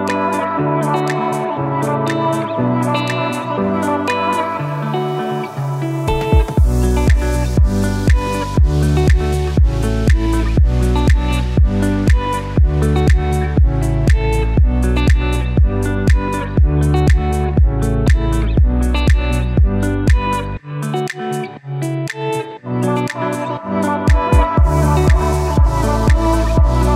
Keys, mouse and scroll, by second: 0.4 click, 11.5 click, 12.4 Up, 15.7 shift+Up, 19.1 Down, 23.4 click, 26.7 click.